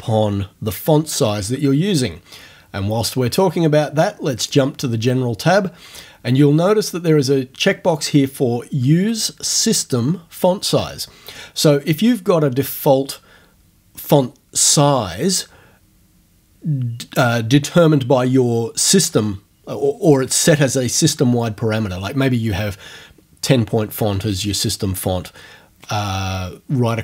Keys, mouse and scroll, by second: 4.4 click.